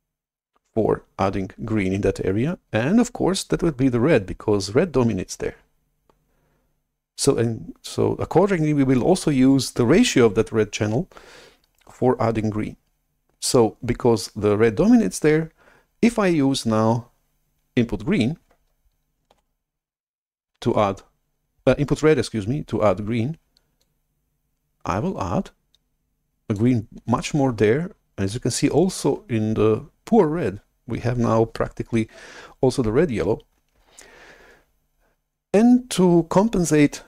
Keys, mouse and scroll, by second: 19.3 shift+super+F11, 23.9-26.5 drag.